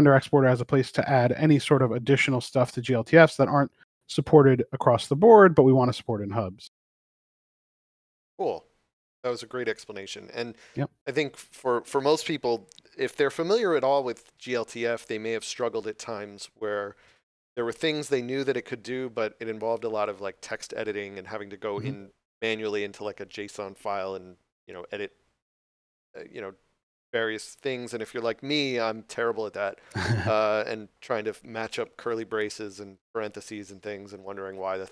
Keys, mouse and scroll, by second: 6.1 click.